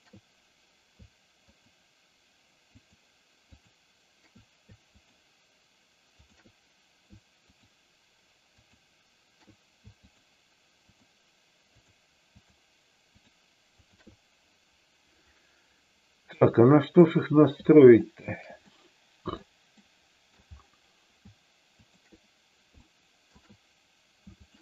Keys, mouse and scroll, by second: 1.5 shift+click, 2.9 shift+click, 3.4 shift+click, 5.0 shift+click, 6.1 shift+click, 7.5 shift+click, 8.5 shift+click, 10.1 shift+click, 10.8 shift+click, 12.3 shift+click, 13.0 shift+click, 16.3 middle click, 17.9 shift+click, 18.7 middle click, 19.8 middle click, 22.8 shift+middle click, 24.4 shift+click.